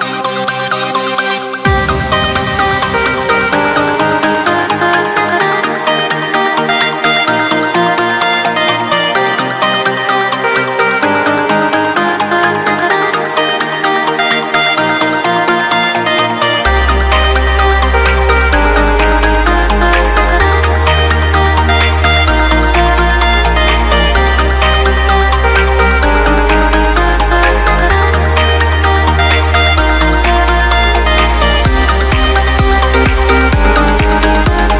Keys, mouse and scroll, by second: 3.5 click, 7.8 click, 16.6 click, 21.7 click, 28.1 click, 30.0 click.